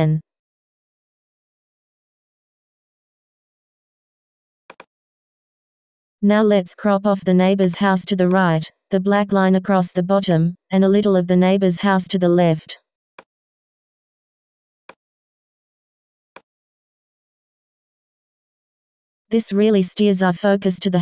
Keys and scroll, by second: 19.1 Return.